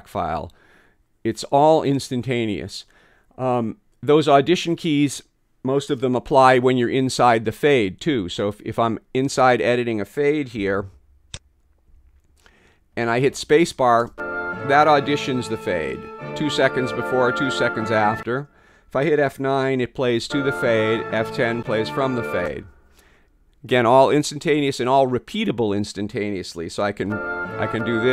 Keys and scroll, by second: 11.9 f, 14.1 space, 20.3 F9, 21.6 F10, 22.4 space, 27.1 space, 27.7 F9.